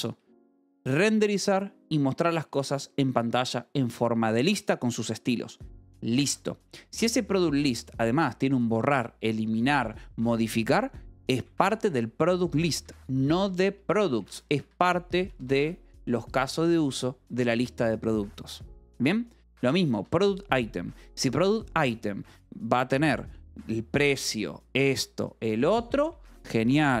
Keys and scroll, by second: 7.0-7.9 typing, 13.2-16.4 typing, 19.3 Escape, 19.3-20.5 typing.